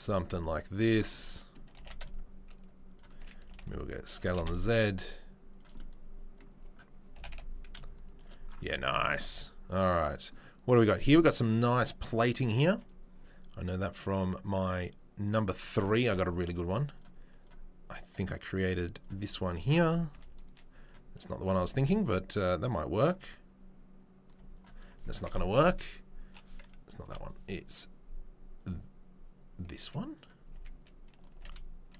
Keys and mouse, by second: 3.4 s, 4.2 g, 4.4-5.6 shift+middle drag, 7.1 g, 7.7 shift+middle click, 10.1-16.9 middle drag, 17.0-18.0 middle drag, 19.0-26.6 shift+middle drag, 20.1 s, 21.6 g, 25.5 Delete, 27.1 Delete, 27.1-27.6 middle drag, 27.7-28.6 middle drag, 31.0-31.9 middle drag, 31.3 g.